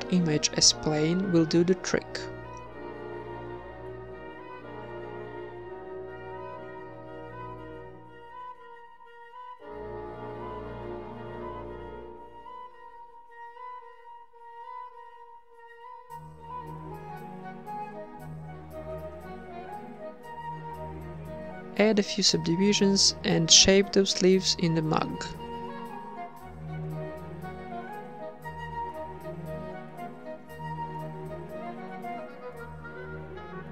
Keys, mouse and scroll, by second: 0.0-2.4 drag, 2.4 z, 2.9 z, 3.5 z, 4.8 z, 4.8 s, 4.8 g, 5.7 Tab, 6.1 w, 7.1 t, 8.6 t, 9.2 Tab, 9.3-10.3 middle drag, 14.7-16.9 drag, 15.4 s, 16.9-19.6 typing, 18.5 Tab, 20.6 Tab, 20.6 t, 21.4 Tab, 21.6 2, 22.8 w, 23.8 Tab, 23.8 w, 24.2 Tab, 24.2 click, 24.5 Tab, 24.9 click, 25.3 middle click, 25.3 z, 25.9 click, 26.1 g, 26.9 h, 28.2 click, 28.3-33.7 typing, 28.4 click, 28.5 click, 28.6 Tab, 28.8 ctrl+Up, 28.9 click, 29.6 Tab, 29.7 ctrl+1, 31.7 Tab, 31.8 click, 32.0 click, 32.1 middle click, 32.4 Tab, 32.5 ctrl+1, 32.6 Tab, 33.2 Tab, 33.4 Tab.